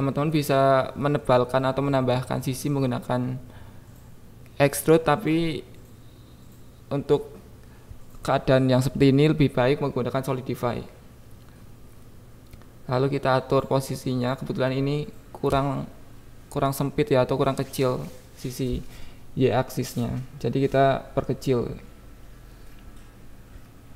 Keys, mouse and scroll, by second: 0.2 click, 0.9 KP_1, 3.0 click, 4.1 click, 5.2 click, 6.3 shift+click, 7.6 click, 7.8 click, 8.0 KP_1, 8.3 right click, 9.3 KP_7, 9.9 click, 10.1 Tab, 10.4 click, 10.8 alt+z, 11.1 click, 11.8 g, 11.8 y, 12.2 click, 12.6 click, 13.1 g, 13.2 y, 14.3 y, 14.3 g, 15.6 click, 16.2 Tab, 16.3 Tab, 17.4-18.4 shift+drag, 18.5 Tab, 19.0 shift+click, 20.2 KP_1, 20.9 click, 21.6 KP_7, 22.2 click, 22.5 click, 23.7 click.